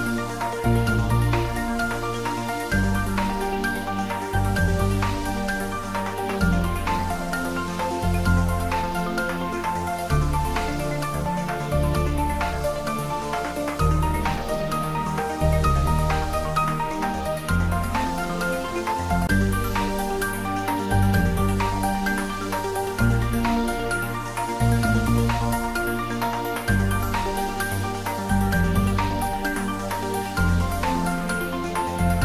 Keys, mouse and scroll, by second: 2.1 click, 7.7 click, 9.3-11.1 scroll down 1, 11.8 middle click, 12.3 scroll up 1, 13.5 middle click, 14.6 click, 16.2-18.6 typing, 19.7 Return, 21.2 click, 22.5-24.8 typing, 25.2 Return, 26.7-27.7 scroll up 1, 28.5-30.9 drag, 30.9 scroll down 1, 31.8 middle click.